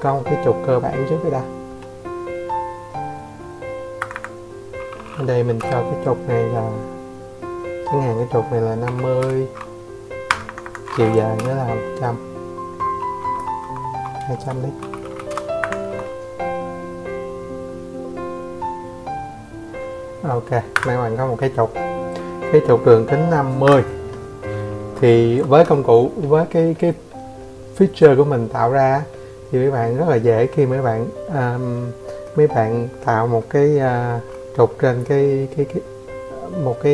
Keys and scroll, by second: 1.0-1.3 typing, 2.4 Escape, 2.5 Escape, 2.8 Escape, 3.4 m, 5.7-7.2 typing, 7.3 Return, 7.7 Escape, 12.8 Escape, 15.8 Escape, 17.7 a.